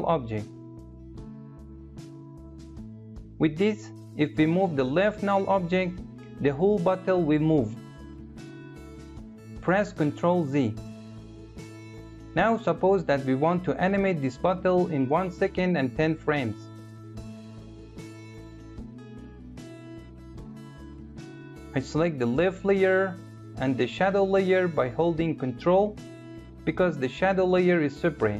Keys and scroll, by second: 9.5 ctrl+z.